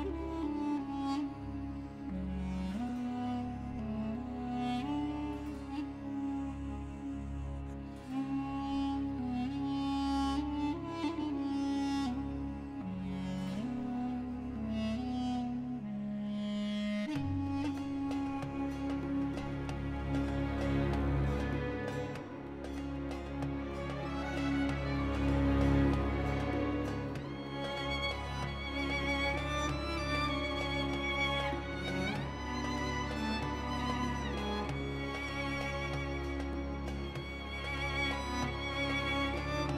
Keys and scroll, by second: 0.3 r, 0.6 x, 1.4 g, 1.6 y, 5.5 Tab, 5.8 a, 6.3 s, 7.3 Tab, 7.6 alt+a, 9.5 g, 9.9 z, 15.0 alt+a, 18.0 Tab, 19.0 3, 19.6 shift+s, 21.0 Tab, 23.8 shift+a, 30.7 r, 30.9 y, 31.0 9, 31.4 Return, 32.7 ., 33.6 Tab, 34.6 s, 34.8 y, 37.2-39.0 typing.